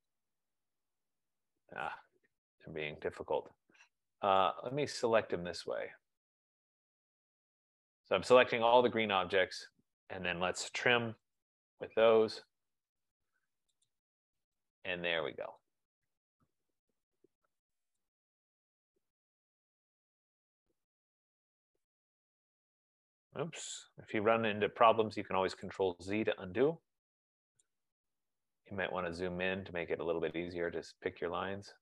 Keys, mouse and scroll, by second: 0.2 click, 1.3 click, 2.7 Escape, 3.6 Escape, 4.5 right click, 7.8 click, 10.8-11.8 typing, 14.0 click, 15.4 click, 15.7 click, 16.5 click, 18.2 click, 18.5 F15, 19.1 click, 20.1 click, 21.4 click, 22.5 click, 24.5 ctrl+z, 26.0 click, 27.8 click, 29.1-29.6 scroll, 29.6-30.4 scroll, 31.0 click.